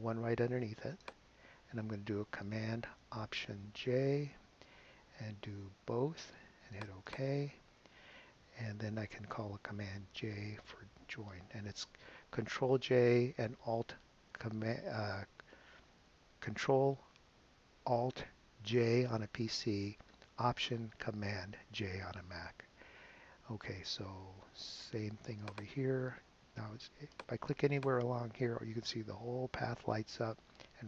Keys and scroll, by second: 3.9 alt+super+j, 10.8 super+j.